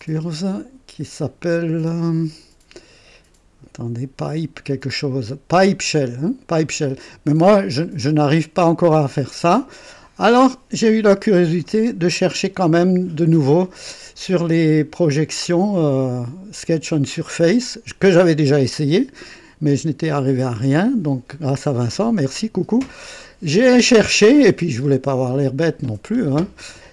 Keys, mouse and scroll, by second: 0.1 click, 26.7-26.9 drag.